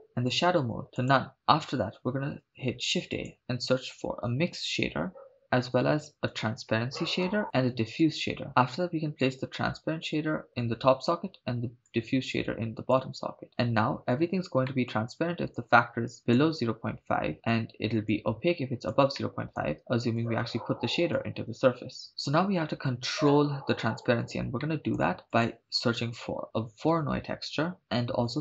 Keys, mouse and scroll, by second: 0.3-1.3 drag, 2.1 shift+a, 5.1 BackSpace, 5.7 shift+a, 7.8 shift+a, 8.5-9.2 scroll up 5, 9.2 click, 9.5-10.5 drag, 11.9 click, 14.7 middle click, 15.6 click, 18.1 click, 19.2 middle click, 20.2 click, 20.4-21.7 drag, 24.6 middle click, 25.2 shift+a, 28.3 shift+a.